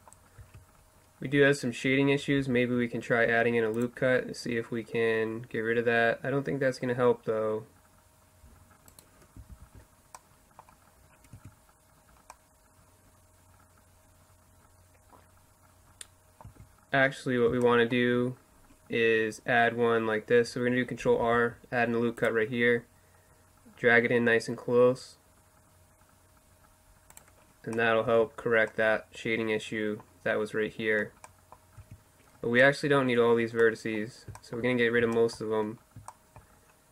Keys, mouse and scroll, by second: 1.4 ctrl+r, 8.5 ctrl+z, 10.4 Tab, 15.2-18.7 middle drag, 15.5 Tab, 20.2 ctrl+r, 26.7-28.5 middle drag, 27.1 Tab, 30.8 Tab, 35.3 middle click.